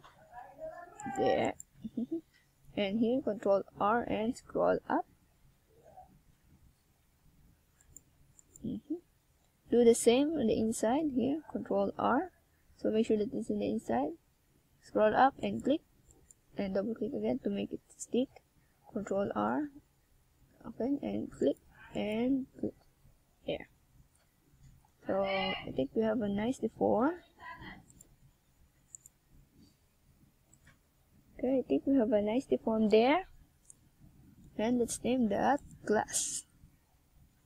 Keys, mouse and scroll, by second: 0.2 click, 0.7 ctrl+scroll up 3, 1.4-2.2 ctrl+scroll up 2, 2.2 ctrl+scroll down 1, 3.5 KP_1, 5.7 e, 8.0 click, 12.2 g, 13.1 click, 13.5 e, 15.1 click, 15.3 e, 17.7 click, 17.8 e, 19.7 click, 19.8 e, 21.4 click, 21.6 e, 22.8 click, 22.9 e, 23.9 click, 24.3 Tab, 25.2 Tab, 26.2 a, 26.3 z, 28.2 z, 29.5 c, 30.4 middle click, 31.0 right click, 31.3 shift+right click, 31.8 right click, 32.3 right click, 32.7 right click, 33.3 right click, 34.1 KP_1, 35.6 g, 36.7 click, 37.0 a.